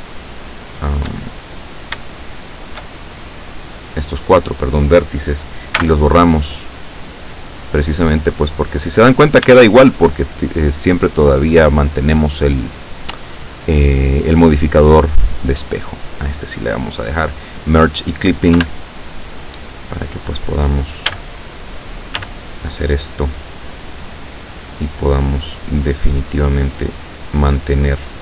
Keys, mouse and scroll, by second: 0.5 shift+right click, 0.9 shift+right click, 1.3 shift+middle click, 2.4 shift+right click, 3.2-4.4 shift+middle drag, 5.9 x, 6.6 click, 7.8-8.3 scroll down 1, 8.4 middle click, 9.2-9.6 scroll up 1, 9.9 shift+click, 13.1 click, 15.4-16.0 drag, 18.7 KP_7, 21.1 a, 22.3 s, 24.3 click, 25.1-28.2 drag.